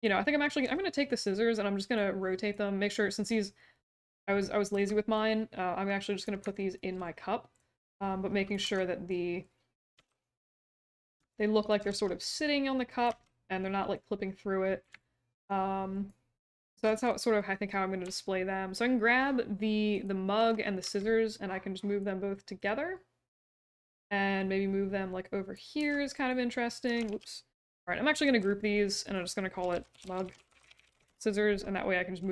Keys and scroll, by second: 0.6 e, 4.7 w, 8.6 r, 9.9 w, 11.8 e, 13.0 w, 20.8 w, 25.7 e, 27.0 ctrl+z, 28.1 ctrl+g, 29.4-32.2 typing.